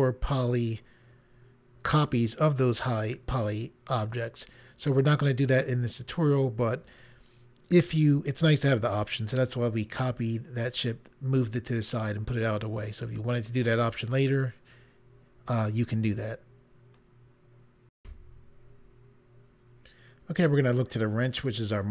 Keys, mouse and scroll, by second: 18.0 Pause, 21.3 click.